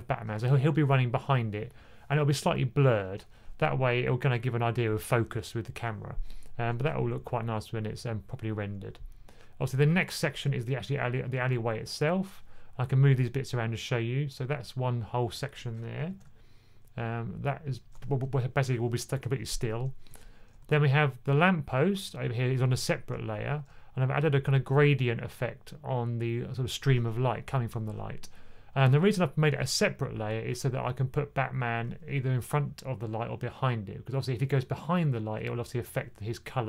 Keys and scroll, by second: 16.0 super+z, 17.8 super+z, 20.5 2.